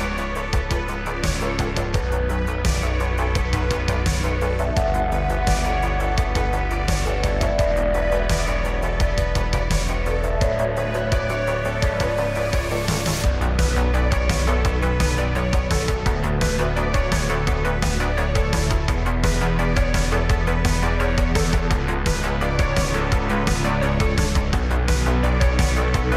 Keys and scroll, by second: 4.5 shift+d, 4.8 z, 5.8 shift+d, 6.1 x, 7.5 g, 7.6 x, 10.0 Tab, 10.5 g, 12.2 g, 12.3 z, 13.0 g, 13.1 z, 14.3 g, 15.1 Tab, 17.2 Tab, 17.8 g, 19.3 g, 19.4 z, 20.2 g, 20.4 z, 21.1 Tab, 25.4 shift+d.